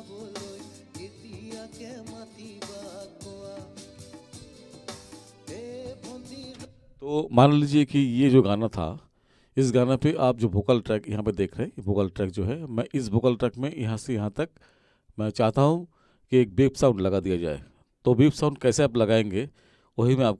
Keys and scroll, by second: 6.6 space.